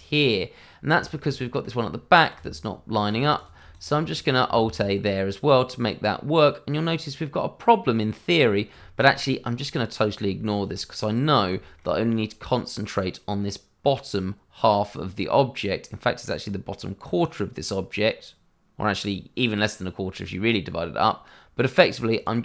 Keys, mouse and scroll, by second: 0.2 click, 0.9 shift+middle click, 1.0 middle click, 1.1 shift+middle click, 1.5 middle click, 2.3 Tab, 3.3 click, 3.7 shift+click, 3.7 click, 4.1 middle click, 4.6 alt+a, 5.1-5.5 scroll down 1, 5.5 middle click, 10.3 shift+middle click, 10.4 middle click, 11.6 shift+middle click, 11.6 middle click, 15.9 middle click, 22.1 click.